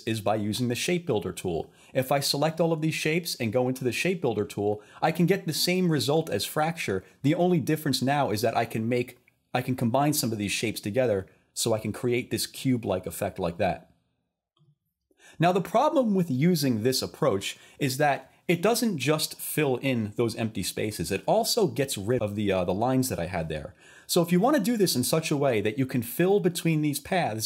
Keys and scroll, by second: 24.1 super+z.